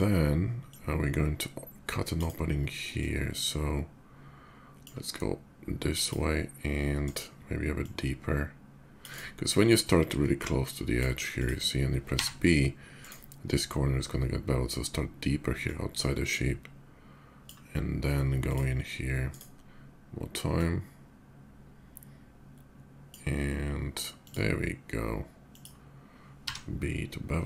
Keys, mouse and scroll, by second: 0.4-1.9 shift+drag, 2.7-4.6 drag, 5.8 click, 6.8 right click, 7.5-8.8 drag, 8.9-10.0 right drag, 10.0-10.7 drag, 11.1 click, 11.9 b, 12.7 right click, 12.7 b, 15.3-17.2 drag, 18.2 click, 19.0 right click, 20.2-22.9 drag, 24.0 click, 25.3 click, 26.2 b.